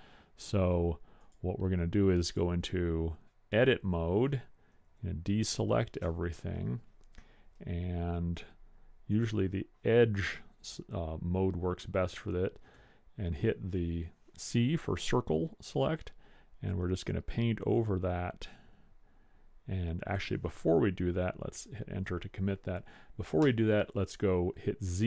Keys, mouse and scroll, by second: 1.2 click, 2.1 click, 3.0 click, 5.1 a, 9.5 click, 11.0-12.9 middle drag, 12.9 c, 23.5 z.